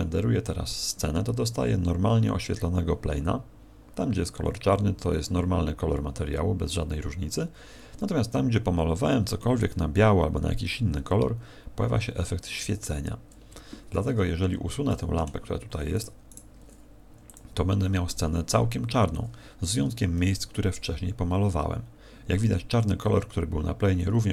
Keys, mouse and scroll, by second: 13.5 Escape, 14.2-14.8 scroll down 5, 14.8 middle click, 15.9 right click, 16.2 right click, 17.0 x.